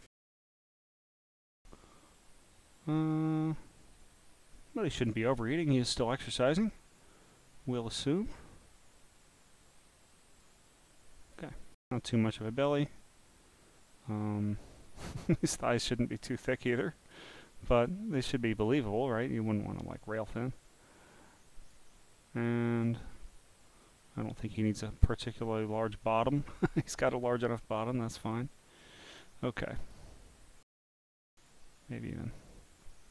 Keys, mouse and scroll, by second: 0.4 scroll down 2, 2.2-5.1 drag, 5.4 click, 7.0 click, 10.9 click, 13.3 click, 16.5 click, 18.1 click, 22.1 click, 23.4 click, 25.2-28.3 drag, 28.8 click, 29.5 click, 31.5 click, 32.4-33.1 drag.